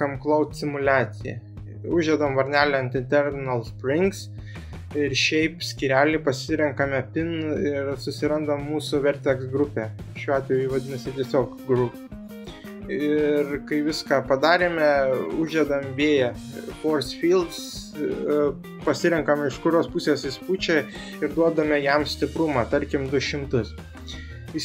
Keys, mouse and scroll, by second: 1.1 drag, 4.6 click, 7.5 click, 8.5 click, 14.9 Escape, 14.9 ctrl+z, 14.9 g, 15.2 shift+a, 20.5 r, 21.8 Escape, 22.2-22.8 middle drag, 24.4-24.6 drag.